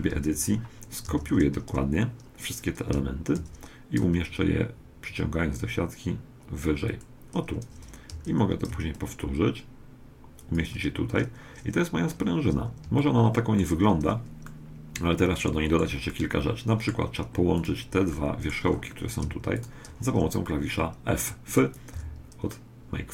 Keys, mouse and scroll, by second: 0.1 a, 1.1 a, 3.4 shift+d, 8.3 shift+d, 13.0-17.6 middle drag, 17.6-19.3 right drag, 19.3 middle click, 19.7-21.5 right drag, 21.1-22.3 middle drag, 21.9 f, 22.5-23.1 middle drag.